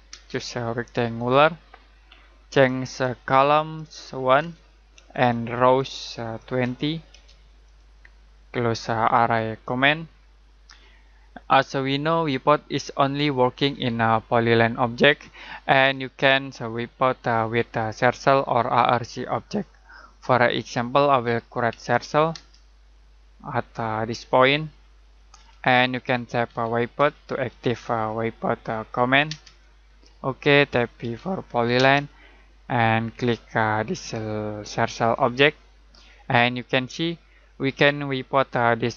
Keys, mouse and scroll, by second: 0.1 space, 1.1 click, 4.3 1, 5.1 click, 6.4-7.6 typing, 7.6 click, 21.7 c, 22.3 space, 23.5 click, 26.2-27.9 typing, 29.2 space, 31.0 p, 31.7 space, 35.2 click.